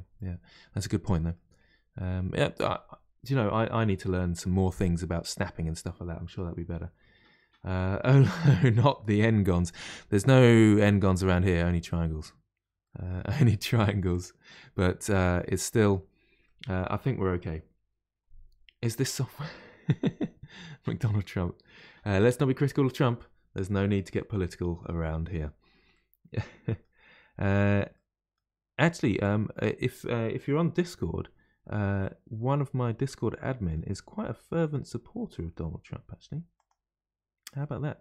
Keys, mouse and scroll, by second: 0.5-1.6 middle drag, 1.6-2.1 scroll down 2, 2.1-4.9 middle drag, 4.9-5.4 scroll down 1, 5.4-8.4 middle drag, 9.7-11.5 middle drag, 11.5-12.8 scroll up 2, 12.8-14.1 middle drag, 14.1 click, 15.0 middle click, 15.8-16.4 scroll down 2, 16.4-19.4 middle drag, 22.0 scroll down 1, 23.6-24.2 scroll down 1, 24.2-25.2 middle drag, 25.2-25.9 scroll up 2, 25.9-29.2 middle drag, 29.2 click, 32.0-34.2 middle drag, 34.2 g, 37.6-38.0 middle drag.